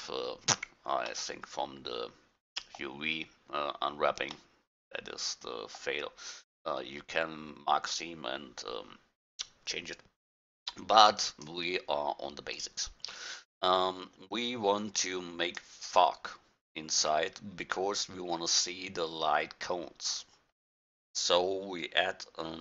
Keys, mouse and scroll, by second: 2.1-3.2 middle drag, 4.6 middle click, 6.6-11.2 middle drag, 11.2-13.1 drag, 15.1-16.6 drag, 16.6-18.5 middle drag, 20.5-22.5 middle drag.